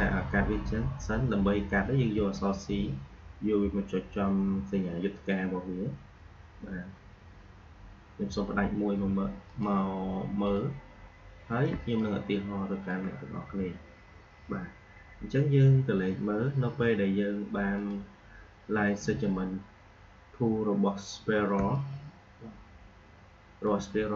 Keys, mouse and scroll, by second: 2.1 c, 5.0 click, 9.4 click, 11.6 space, 11.9 click, 12.1 space, 17.7 click, 21.5 space.